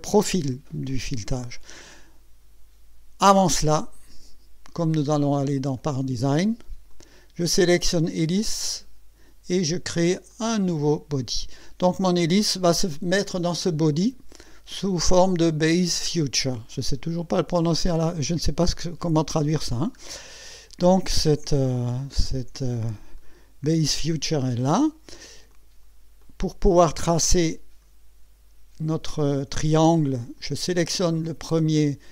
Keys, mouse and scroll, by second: 0.0 scroll up 2, 0.9 click, 3.7 click, 5.2 click, 5.7 click, 6.9 click, 10.3 click, 20.1 scroll up 3, 21.9-22.7 right drag, 23.1-24.3 drag, 24.6-25.3 drag, 25.5 click, 26.2-27.5 drag, 30.4 click.